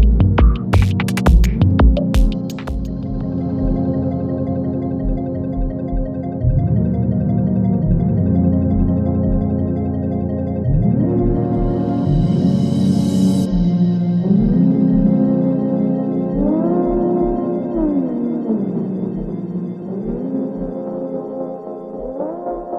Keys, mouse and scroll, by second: 2.3 space.